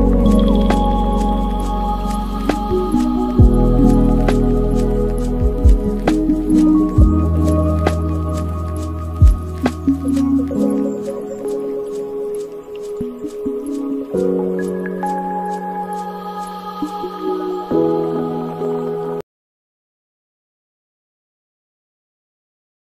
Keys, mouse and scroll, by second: 1.4-10.1 drag, 10.1 space, 11.7 space, 14.7-16.7 drag, 16.7-18.6 scroll up 14, 18.6-22.6 shift+drag, 22.6 scroll down 2.